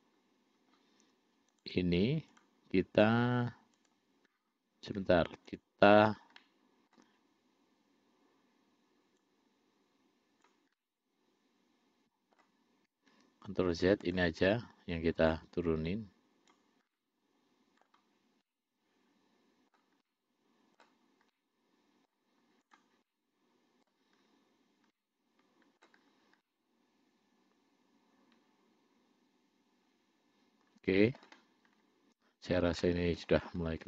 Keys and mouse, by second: 1.8 click, 2.6 click, 4.1 click, 5.8 shift+click, 6.6 middle click, 9.5-10.8 drag, 11.0-12.7 middle drag, 13.4 ctrl+z, 14.3 click, 15.5-16.9 drag, 17.2 middle click, 18.7-20.1 middle drag, 20.3 middle click, 21.6 middle click, 23.0 click, 23.3 middle click, 25.2 middle click, 26.7-31.5 middle drag, 33.1 middle click.